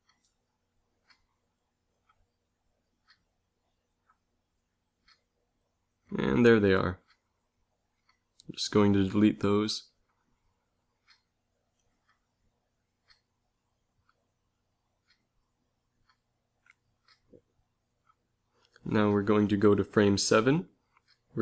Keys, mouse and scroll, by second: 7.1 a, 7.6 b, 9.7 x, 18.2 Left.